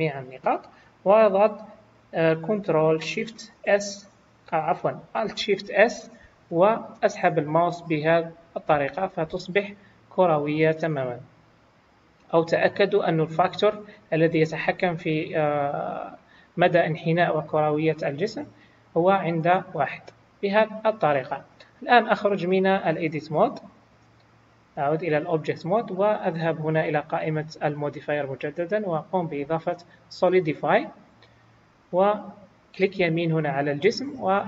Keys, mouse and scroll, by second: 3.5 ctrl+shift+s, 5.6 alt+shift+s, 13.3 click, 24.3 click, 26.8 click, 33.4 right click.